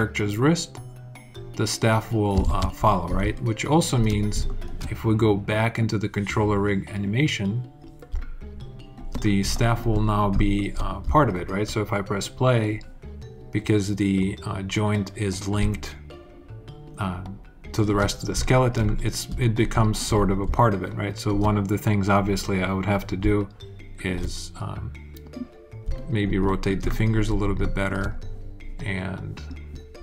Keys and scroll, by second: 2.2 super+z, 3.0 alt+super+z.